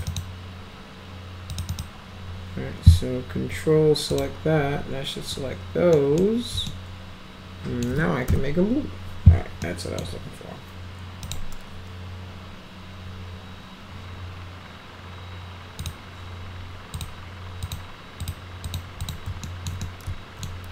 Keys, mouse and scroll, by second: 0.1 ctrl+click, 1.5 ctrl+click, 1.7 ctrl+click, 4.1 ctrl+click, 5.9 middle click, 6.7-7.8 alt+middle drag, 8.3 m, 9.7-10.0 middle drag, 11.3 click, 15.8 click, 17.0 click, 17.6 click, 18.2 click, 18.6 click, 19.0 click, 19.4 alt+middle click, 19.8 alt+middle click.